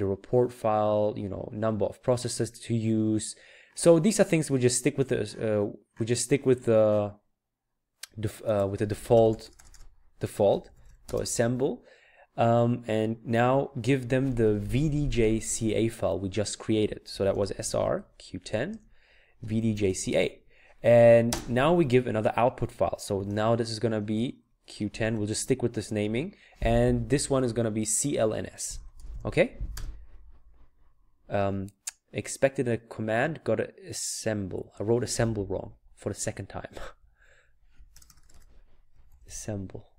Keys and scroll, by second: 10.3-11.3 typing, 17.2-20.0 typing, 23.2-26.0 typing, 28.5-29.8 typing, 34.6 Up, 35.6-37.9 Left, 38.7-39.9 typing.